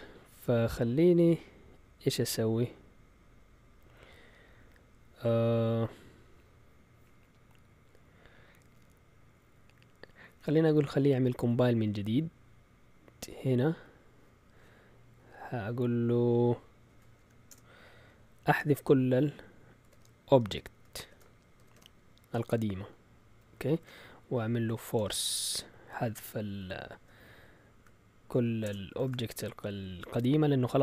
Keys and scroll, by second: 10.2-11.4 typing, 13.0 Up, 17.2 End, 17.5 Return, 19.6-22.2 typing, 22.6 Left, 23.2 Left, 23.2 Left, 23.3 Left, 23.5 Right, 23.6-26.6 typing, 27.8-29.4 typing, 29.4 Down, 30.4 Up, 30.4 typing.